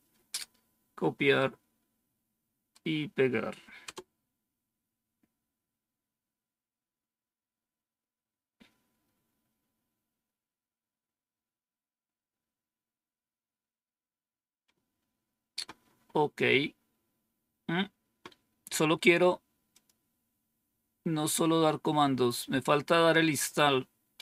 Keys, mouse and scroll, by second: 1.3-2.6 right drag, 3.7 Return, 19.6 click.